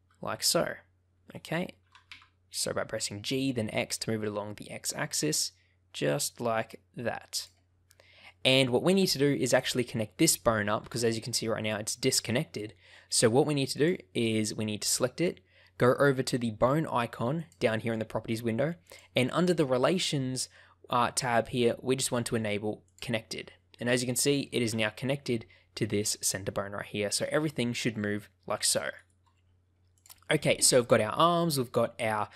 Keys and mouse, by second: 1.3 click, 1.8 g, 2.0 x, 7.3 click, 8.2 shift+middle click, 9.5 click, 10.8 g, 13.7 click, 18.9 click, 19.4 click, 22.8 click, 24.6 g, 28.9 right click, 29.9 click.